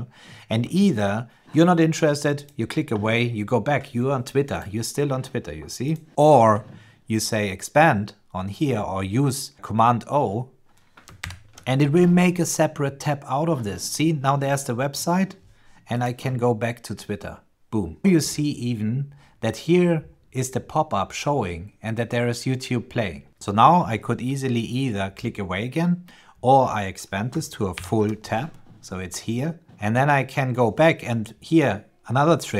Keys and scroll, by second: 11.0 super+o, 27.4 super+o.